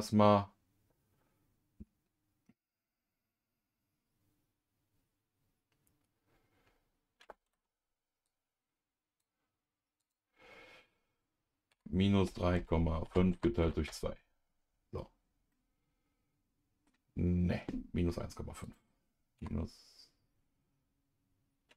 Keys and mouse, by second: 8.2 click, 8.9 click, 10.0-14.2 drag, 15.5-16.9 middle drag, 18.6-21.7 drag.